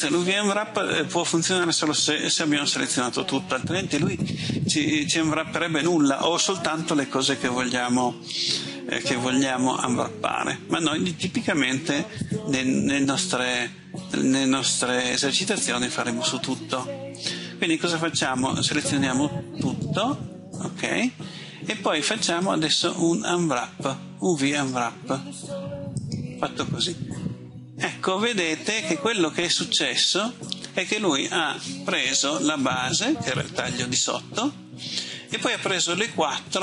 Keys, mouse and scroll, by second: 13.8-14.4 scroll down 1, 18.9 a, 22.4-25.7 drag.